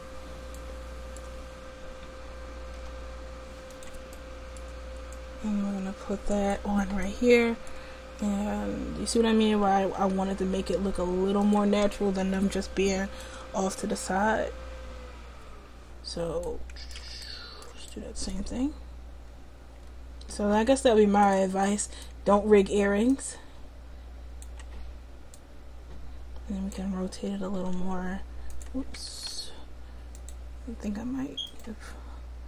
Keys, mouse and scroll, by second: 2.8 g, 5.2 click, 10.0 g, 20.2 g, 21.1 click, 23.1-27.6 drag, 27.6 r, 29.4 ctrl+z, 30.2 click.